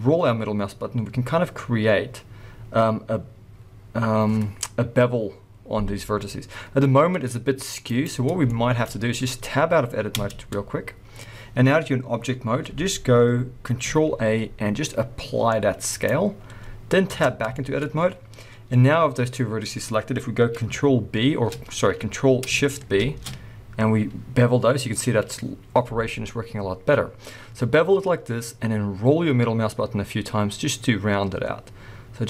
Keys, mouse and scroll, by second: 8.0 right click, 8.2-8.5 scroll down 1, 8.5 shift+middle click, 10.1 Tab, 14.1 ctrl+a, 16.5 scroll up 1, 17.0 Tab, 17.5 shift+middle click, 17.8 scroll up 1, 23.0 ctrl+shift+b.